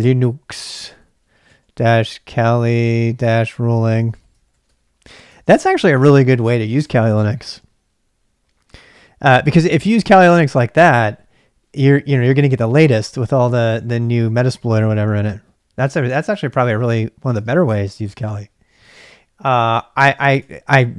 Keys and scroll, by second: 0.0-7.2 typing, 0.9 ctrl+[, 3.7 ctrl+[, 12.7 j, 16.4-20.7 typing, 20.7 Return.